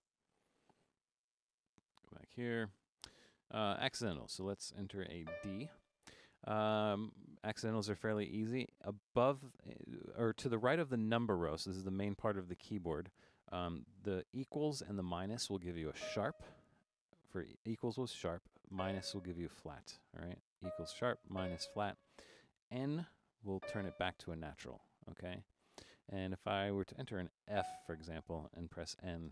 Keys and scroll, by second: 0.3 BackSpace, 3.9 5, 5.0-5.7 typing, 16.0 =, 18.8 -, 20.6-21.4 typing, 23.6 n, 27.6 f.